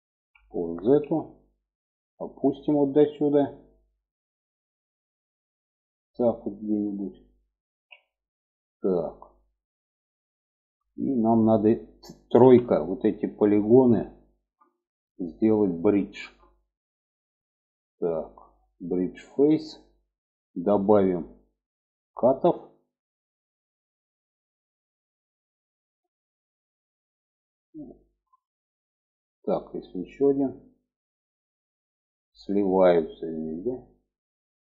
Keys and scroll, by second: 7.1 alt+z, 11.7 3.